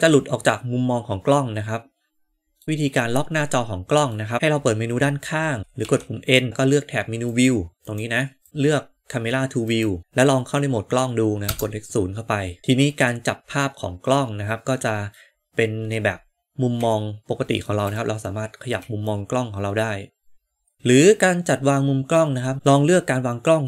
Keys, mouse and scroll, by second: 5.6 n, 5.7 n, 7.2 click, 8.4 click, 9.6 click, 11.4 KP_0, 12.6-15.2 middle drag, 15.6 middle click, 16.9-17.7 shift+middle drag, 17.9 middle click, 19.1-20.7 shift+middle drag, 20.7-22.5 drag.